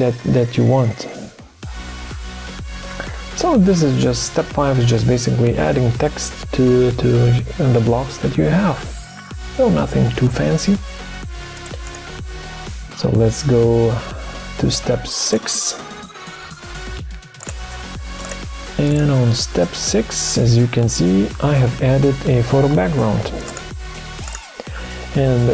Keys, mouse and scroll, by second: 12.2 ctrl+d, 16.4 BackSpace.